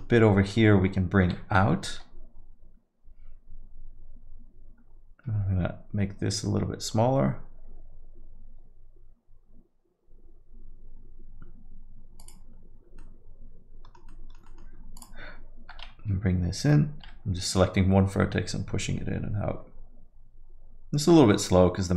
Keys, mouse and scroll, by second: 3.3 g, 13.0 alt+middle click, 14.1 alt+middle click, 14.7 alt+middle click, 15.0 click, 19.4 g.